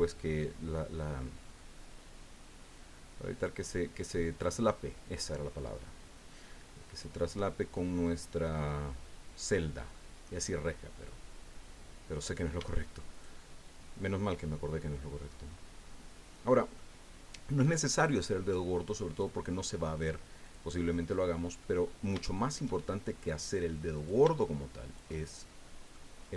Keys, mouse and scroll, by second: 1.5-3.6 drag, 4.3 scroll down 2, 4.7 click, 6.5-8.1 drag, 8.6-9.0 scroll up 1, 9.5 click, 10.6 click, 12.1 right click, 13.1 shift+right click, 15.1-16.9 drag, 20.4 click, 21.1 click, 21.8 middle click, 21.8-22.4 scroll up 2, 22.0 shift+middle click, 22.2 shift+click, 22.4-23.9 shift+middle drag, 23.9 right click, 24.8-26.1 shift+right drag, 25.1 shift+click.